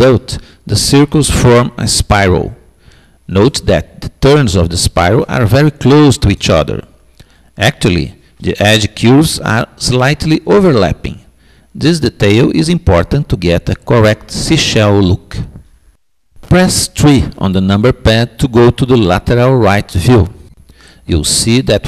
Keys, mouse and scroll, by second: 0.0-1.9 middle drag, 5.5-7.2 middle drag, 8.1-9.8 middle drag, 15.8 KP_3, 18.5-20.3 middle drag, 20.4-21.8 middle drag.